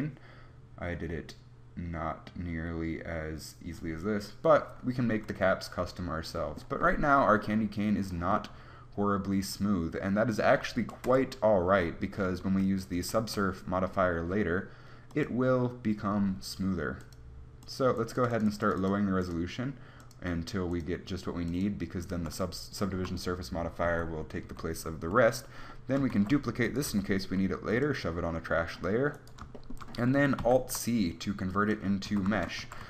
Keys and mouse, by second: 5.0-7.4 middle drag, 8.0 middle click, 11.3 KP_1, 12.7 z, 13.2 z, 13.5 z, 16.9-22.4 drag, 22.4 z, 24.1 Tab, 24.8 Tab, 26.4 shift+d, 27.2 m, 30.8 alt+c, 32.4 Tab.